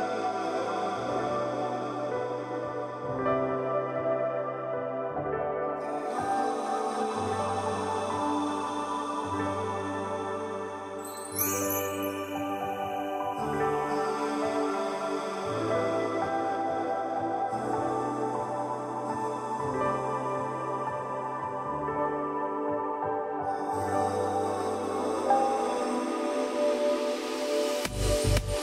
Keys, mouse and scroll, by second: 5.4 alt+scroll up 1, 6.4-7.3 drag, 9.1-9.7 alt+scroll down 1, 10.0-10.6 drag, 11.9 ctrl+z, 12.9-13.3 drag, 18.9-23.2 alt+drag, 24.2-24.8 alt+scroll up 1, 25.0-28.6 drag.